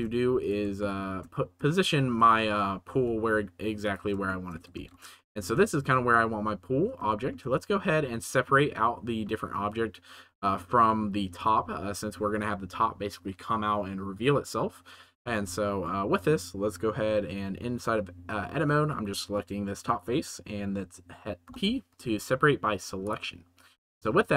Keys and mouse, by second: 0.4 right drag, 0.8 shift+drag, 0.9 shift+middle drag, 1.7-2.1 shift+middle drag, 2.8 s, 3.8 middle click, 4.4 shift+middle click, 4.7 ctrl+s, 5.1-5.4 shift+middle drag, 7.3 shift+middle click, 7.9 Tab, 9.1 middle click, 10.2 3, 10.6 middle click, 15.9 middle click, 18.7 middle click, 19.4 middle click, 21.4 p.